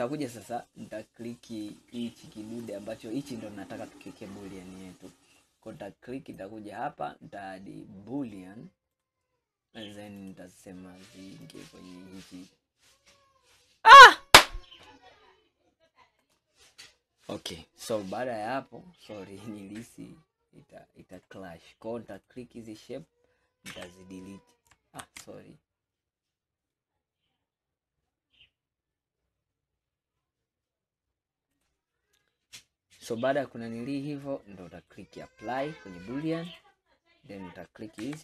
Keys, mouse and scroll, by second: 0.0-0.9 scroll up 2, 0.9-2.7 middle drag, 2.7 click, 3.9-4.8 scroll down 1, 4.8-6.3 scroll down 1, 9.1-9.4 drag, 10.2 click, 19.1-22.2 middle drag, 22.2 click, 23.7 Delete, 33.8 scroll down 2, 34.3-36.5 middle drag, 36.5 click, 38.0 Delete.